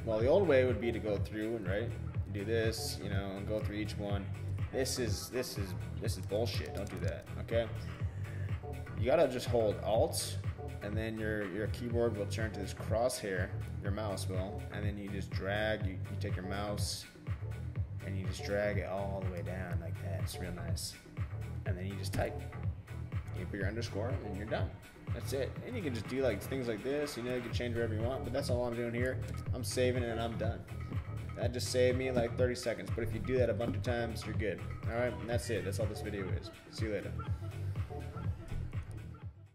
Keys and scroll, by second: 0.7 shift+Down, 0.9 Left, 1.4 shift+Left, 1.6 shift+-, 2.2 shift+Down, 2.3 Left, 2.9 shift+-, 3.4 shift+Down, 3.6 Left, 4.3 shift+Left, 4.5 shift+-, 6.2 super+z, 22.1 shift+-, 25.8 Left, 26.6 Right, 27.3 Left, 29.3 super+s.